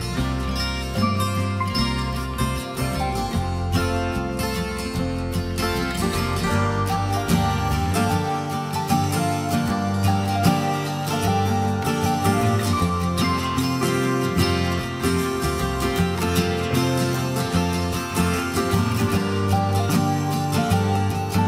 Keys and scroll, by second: 16.1 ctrl+g.